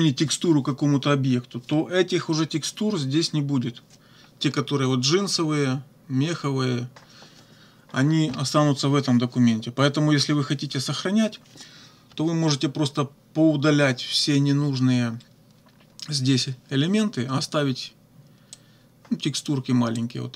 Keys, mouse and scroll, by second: 18.6-19.6 drag, 20.0-20.3 drag.